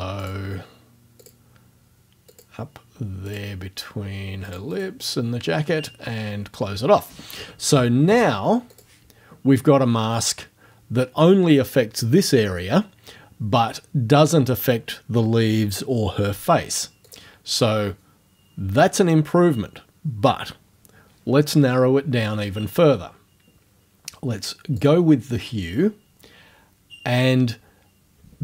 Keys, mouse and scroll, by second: 0.3 click, 1.2 click, 2.3 click, 3.3 click, 4.5 click, 8.7 click, 17.1 click, 24.8 click.